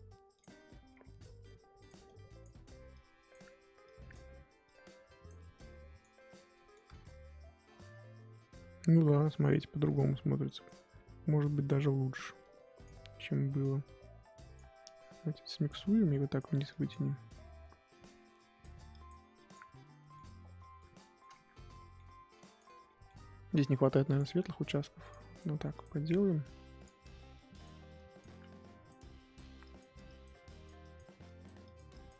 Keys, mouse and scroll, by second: 0.5 scroll down 3, 0.6 middle click, 0.9-1.3 scroll up 2, 1.4-6.5 drag, 6.5 middle click, 7.1 ctrl+z, 7.6-8.3 scroll down 5, 8.3 middle click, 8.5-9.0 scroll up 1, 9.0 middle click, 9.8-10.3 scroll up 1, 10.3 click, 10.9 middle click, 11.9-12.4 scroll up 2, 12.4-17.0 drag, 17.0 scroll down 1, 17.3 middle click, 17.5-18.0 scroll up 1, 18.0-19.7 drag, 19.7-20.8 middle drag, 20.8 scroll up 1, 21.0 middle click, 21.3 ctrl+z, 21.8 middle click, 22.3 click, 22.8-24.1 middle drag, 24.1-32.1 drag.